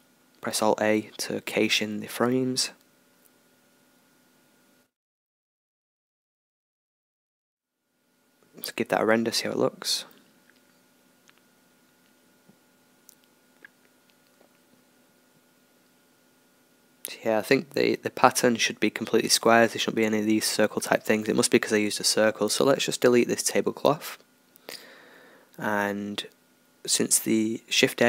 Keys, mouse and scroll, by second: 22.4-25.3 drag.